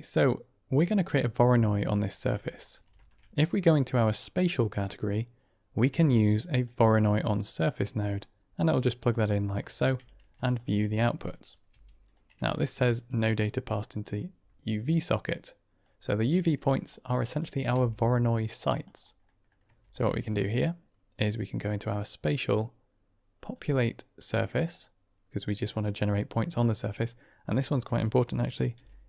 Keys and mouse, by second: 1.9 click, 2.8 shift+a, 8.1-9.1 drag, 9.5 middle click, 11.2-11.5 drag, 11.6 g, 13.4 click, 15.7-16.9 drag, 17.1 click, 17.6 g, 19.2 middle click, 19.7 shift+a, 24.6 click, 25.6-26.6 drag, 28.7 n.